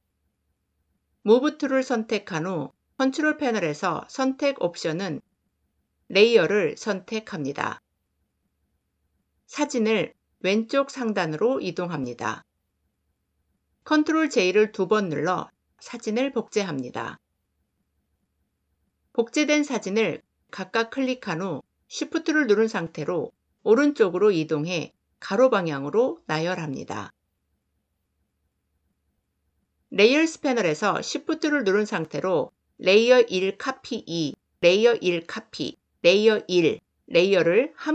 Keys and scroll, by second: 1.2 v, 13.8 ctrl+j.